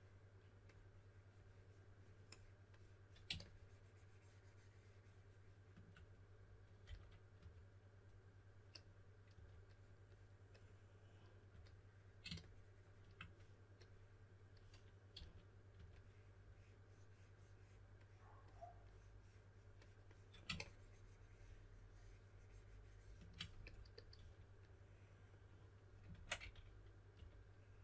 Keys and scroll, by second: 6.8-7.3 typing, 9.3 typing, 11.4 typing, 15.1-16.2 typing, 24.1 4, 26.1 super+z, 26.3-27.6 typing.